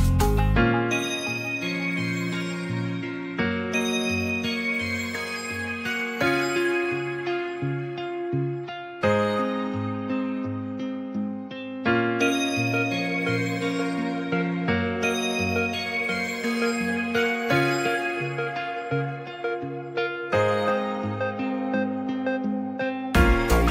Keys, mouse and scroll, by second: 0.6 click, 2.6 click, 3.8 scroll up 1, 3.9 middle click, 4.7 s, 4.9 z, 7.4 g, 9.5 s, 9.7 x, 11.3 shift+click, 11.6 middle drag, 12.2 ctrl+s, 13.1-14.1 shift+drag, 14.2 shift+drag, 15.0 ctrl+a, 15.6 middle drag, 16.2 Tab, 17.2 Tab, 18.2 shift+click, 19.8-20.6 drag, 21.0 click, 21.6 ctrl+s, 22.0 shift+middle click, 22.4 click.